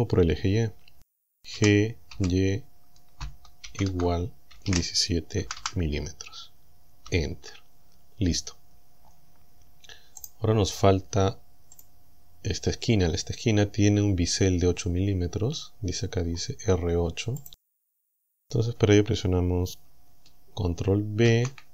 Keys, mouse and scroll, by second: 1.6 g, 2.1 y, 3.7 shift+0, 4.6 KP_1, 4.8 KP_7, 5.5 m, 7.1 Return, 10.3 right click, 11.8 click, 12.8 scroll down 2, 16.3-16.9 scroll up 4, 17.5 click, 21.3 ctrl+b.